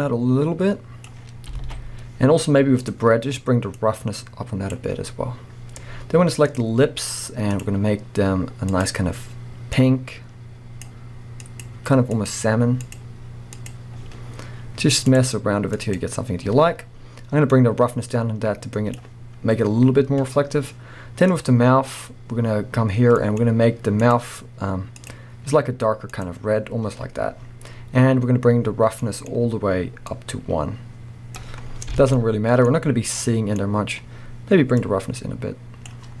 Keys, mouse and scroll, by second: 1.6 alt+a, 1.9 scroll up 2, 2.8 click, 14.3-14.6 scroll up 1, 15.7 click, 17.6-21.6 drag, 19.7-20.8 scroll down 2, 20.8-21.4 scroll down 1, 30.2-31.7 drag, 31.7 scroll down 1, 31.9 alt+a, 32.1-34.9 middle drag, 32.7-33.2 scroll up 1, 33.6-34.3 scroll up 1, 34.9-36.2 drag.